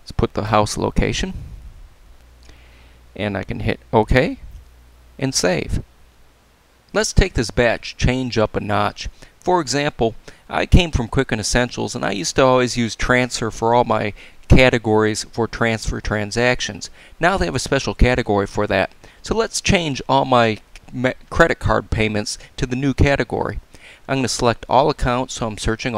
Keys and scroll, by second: 0.5 6, 2.1 Tab, 3.0 BackSpace, 4.4 Return.